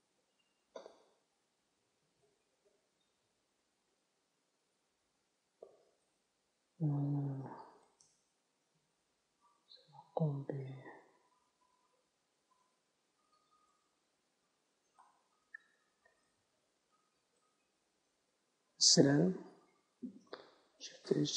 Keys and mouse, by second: 0.1 alt+h, 0.5 ctrl+s, 2.0 KP_0, 4.0 z, 15.9-17.4 right drag, 17.4-19.6 middle drag, 19.6 z, 21.1 shift+h.